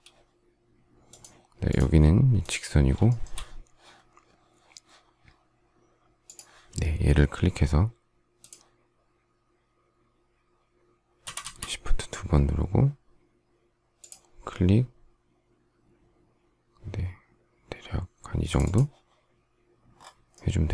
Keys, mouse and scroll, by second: 1.7 space, 3.0 shift+middle click.